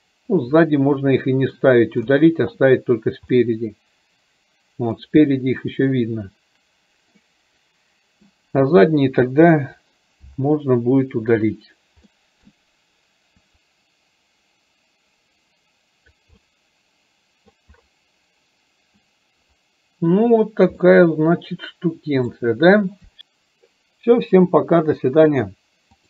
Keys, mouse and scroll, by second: 21.6-22.9 middle drag.